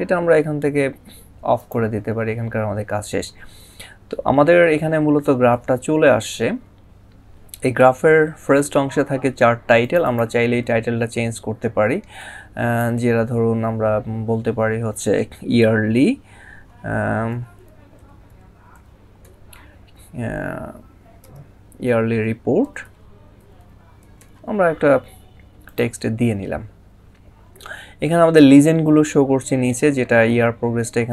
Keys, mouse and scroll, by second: 1.4 click, 9.7 click, 12.0 click, 17.1 typing, 20.2-21.0 typing, 22.4 typing, 25.1 typing, 25.5 click.